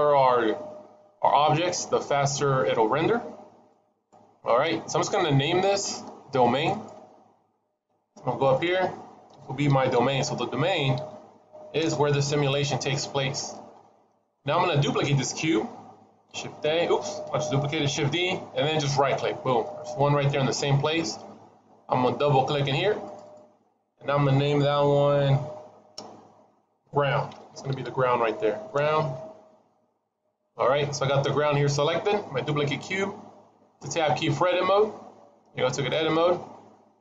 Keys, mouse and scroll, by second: 0.1 middle click, 3.5 click, 8.2 click, 8.4 click, 12.9-13.3 scroll up 2, 13.3 middle click, 16.2 shift+a, 17.9 shift+d, 22.9 click, 23.1 click, 35.1 Tab.